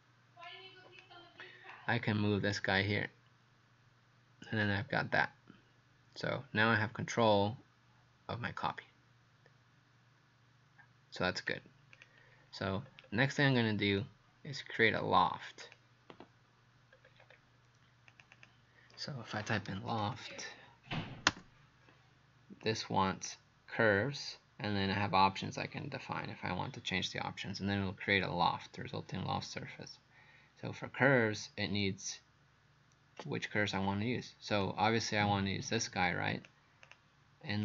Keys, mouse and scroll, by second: 12.7-14.0 scroll down 5, 14.0 click, 16.9-17.5 scroll up 4, 18.1 click, 18.4 click, 19.6-20.8 typing, 21.3 Return, 22.6 click.